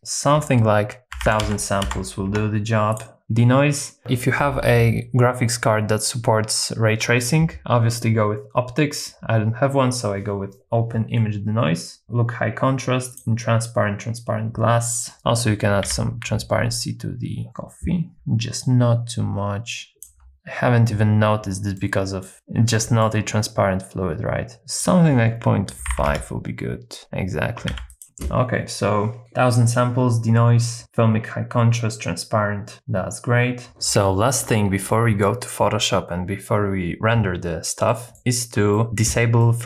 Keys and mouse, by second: 1.4 KP_0, 2.9 click, 15.8 z, 17.5 middle click, 18.1-20.1 ctrl+drag, 21.9 shift+middle click, 22.3 ctrl+b, 22.9 shift+middle click, 24.8-26.1 drag, 27.7 ctrl+b, 28.0 z, 37.9 middle click, 38.7 middle click, 39.4 middle click.